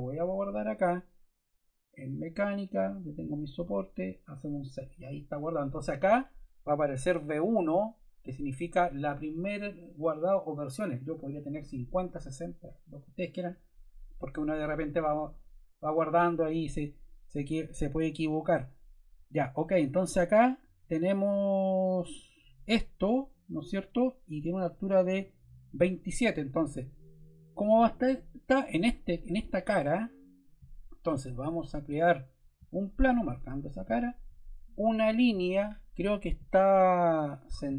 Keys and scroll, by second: 35.2 l.